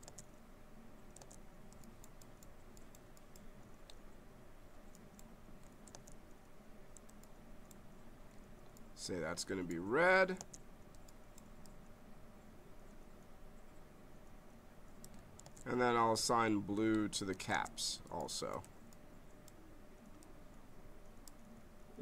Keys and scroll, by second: 0.1 space, 5.9 space, 10.4 space, 15.4 space, 17.5 space.